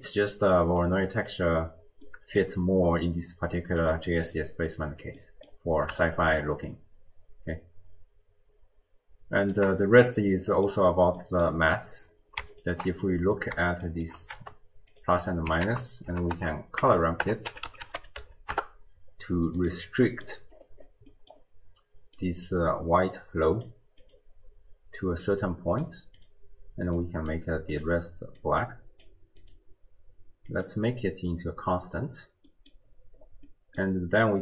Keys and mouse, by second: 0.8 click, 2.1 middle click, 2.2 click, 2.3 middle click, 3.8 click, 4.3 click, 5.2 middle click, 5.3 click, 5.4 middle click, 6.4-9.6 shift+drag, 9.9 middle click, 10.2 click, 10.2 right click, 11.2 click, 11.2 right click, 13.8 shift+click, 14.3 g, 15.7 ctrl+a, 20.1 middle click, 21.1 middle click, 22.2-23.7 drag, 24.0 click, 25.2 click, 26.2 click, 27.7 click, 28.4-29.1 drag, 29.4-30.9 drag, 32.5 click, 32.5 right click, 33.5 middle click, 33.7 click.